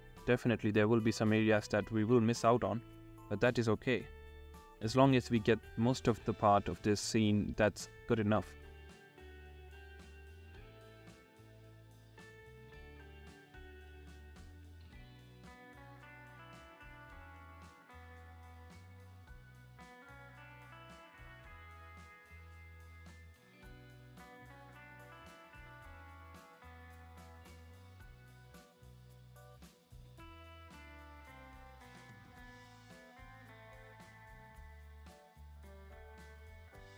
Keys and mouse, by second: 0.0-1.4 typing, 0.1 ctrl+z, 0.9 ctrl+z, 1.2 ctrl+z, 1.9 ctrl+z, 2.0 ctrl+z, 2.5 [, 3.5 alt+q, 3.7 ctrl+z, 3.8-6.1 typing, 3.9 ctrl+z, 4.6 ctrl+z, 4.7 ctrl+z, 5.1 ctrl+z, 5.7 ctrl+z, 6.3 shift+middle click, 6.8 shift+middle click, 7.6 alt+q, 7.7 ctrl+z, 8.0 ], 8.0 ctrl+z, 8.3 ctrl+z, 8.3 [, 9.3-10.9 typing, 10.8 ctrl+z, 10.9 ctrl+z, 13.5-14.7 typing, 14.7 ctrl+z, 15.4 middle click, 15.9 ctrl+z, 16.2 ctrl+z, 16.3 ], 16.5 ], 16.6 ctrl+z, 17.3 shift+middle click, 17.7 ], 17.9 ], 18.2 ctrl+z, 19.1-26.4 typing, 21.0 ctrl+z, 23.8 ctrl+z, 24.8 ctrl+z, 26.0 ctrl+z, 26.1 ctrl+z, 26.3 ctrl+z, 27.1 ctrl+z, 27.5 ctrl+z, 28.1 click, 29.0 ctrl+z, 29.2 ctrl+z, 29.7 ctrl+z, 29.9 ], 30.0 [, 30.5 middle click, 31.4 ctrl+z, 31.8 ctrl+z, 32.1-32.6 ctrl+z, 32.6 shift+click, 35.4-36.9 typing, 35.8 ctrl+z, 36.1 ctrl+z, 36.1 click, 36.8 ctrl+z.